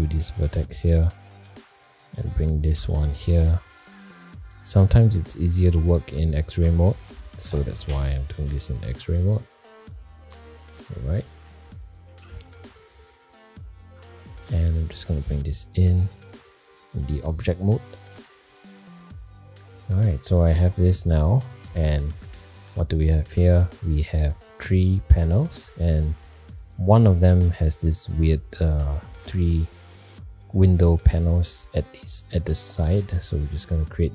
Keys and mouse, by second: 0.5 shift+middle click, 1.6 alt+z, 1.8 click, 2.7 g, 4.5 middle click, 5.5 click, 6.6 g, 8.6 click, 9.1 g, 11.2 middle click, 12.2 alt+z, 12.8 middle click, 13.9 Tab, 14.7 g, 17.0-17.6 middle drag, 17.8 middle click, 18.7-19.8 middle drag, 20.4-21.7 middle drag.